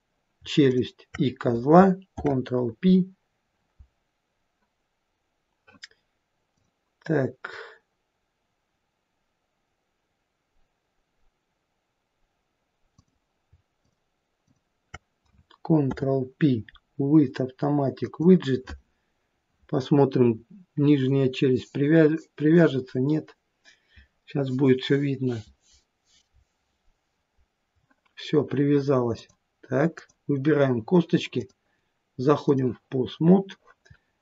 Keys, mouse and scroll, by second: 0.6 shift+click, 2.1 ctrl+p, 6.6 click, 13.0 click, 13.8 shift+click, 14.5 shift+click, 15.9 ctrl+p, 29.2 click, 30.0 click.